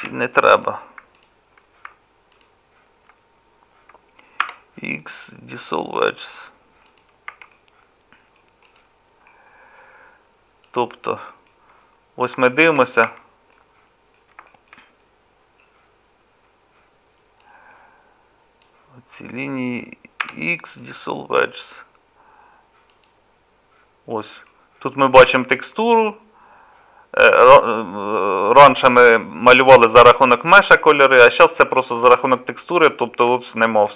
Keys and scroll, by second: 0.0 2, 4.4 x, 7.3 Tab, 13.1 Tab, 20.2 x.